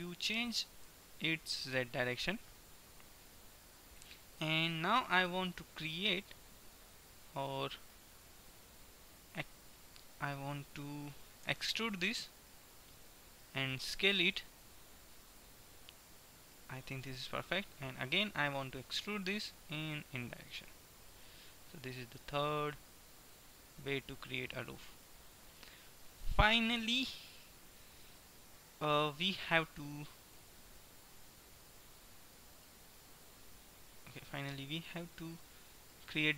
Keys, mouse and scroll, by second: 0.8 g, 4.3-5.7 middle drag, 11.5 e, 16.7-18.7 middle drag, 18.7 e, 21.7-22.8 middle drag, 23.7-26.3 middle drag, 27.2 Tab, 27.7 Tab, 34.8-35.8 middle drag.